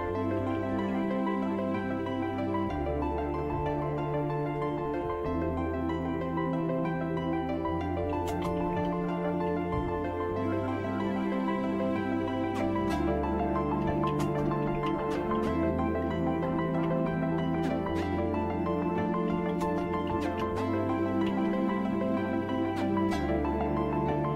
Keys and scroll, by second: 0.1-0.8 typing, 4.4 Return, 4.6-5.5 typing, 7.7-9.3 typing, 9.5 Tab, 12.6-17.3 typing, 15.7 Tab, 16.4 Return, 17.4 Return, 19.0-21.7 typing, 20.9 Return.